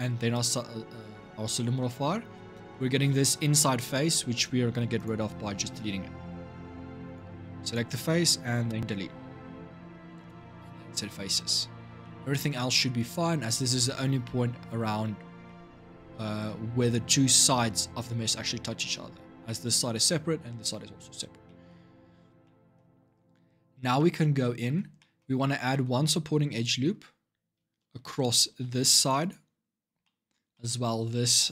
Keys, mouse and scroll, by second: 1.3-4.7 shift+middle drag, 4.7 click, 5.4 Tab, 6.8 click, 8.5 Delete, 11.1 middle click, 11.4-11.8 scroll down 5, 11.8-16.9 middle drag, 16.9 scroll up 2, 18.6-21.0 scroll down 6, 21.2 middle click, 21.7-22.2 scroll up 4, 22.2-26.2 shift+middle drag, 26.2 scroll up 1, 26.3-28.2 middle drag, 28.2 ctrl+r, 29.8 shift+middle click, 30.6 scroll up 2.